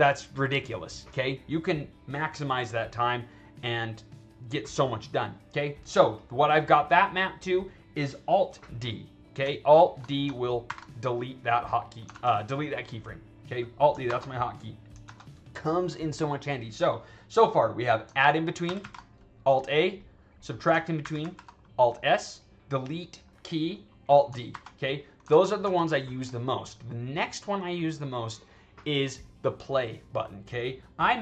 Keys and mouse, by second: 6.1 click, 9.9 drag, 10.6 alt+d, 12.0 ctrl+z, 14.0 alt+d, 15.0 ctrl+z, 17.6 click, 18.6 alt+a, 19.9 click, 20.4 click, 20.9 alt+s, 21.1 alt+s, 22.9 click, 24.4 alt+d, 25.2 ctrl+z, 25.5 ctrl+z.